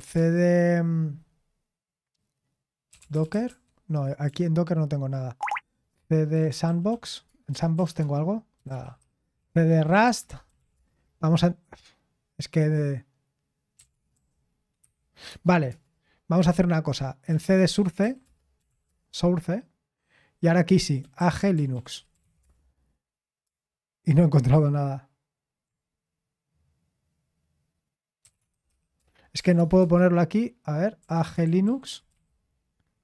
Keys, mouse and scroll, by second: 0.0-0.4 typing, 2.6-10.9 typing, 13.8-15.7 typing, 15.3 Tab, 17.0-19.2 typing, 20.7-23.1 typing, 28.1-32.6 typing.